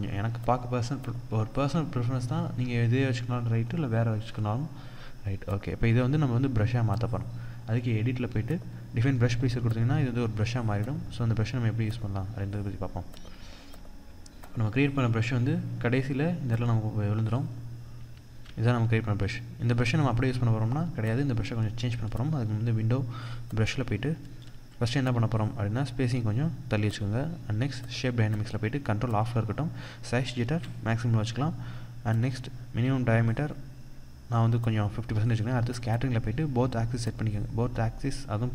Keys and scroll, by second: 1.6 Return.